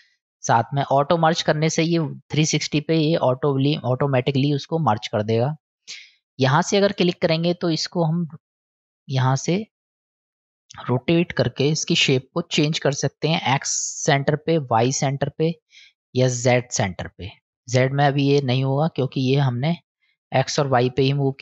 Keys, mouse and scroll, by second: 2.1-2.8 middle drag, 6.3-13.5 drag, 14.2-15.4 drag, 16.2-17.7 drag, 19.1 middle click.